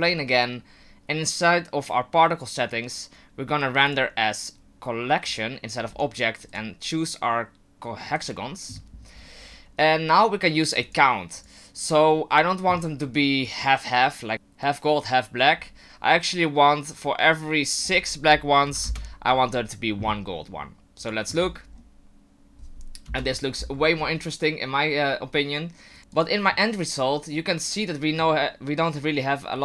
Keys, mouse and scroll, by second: 0.8-1.8 scroll down 2, 3.9 click, 5.9-6.5 scroll down 1, 6.5 click, 6.5-7.0 scroll down 1, 9.1-9.7 scroll down 7, 10.8 click, 11.4 click, 17.8 click, 21.0 click, 21.4-22.1 scroll up 7, 23.1 KP_0, 23.7-24.3 scroll up 4.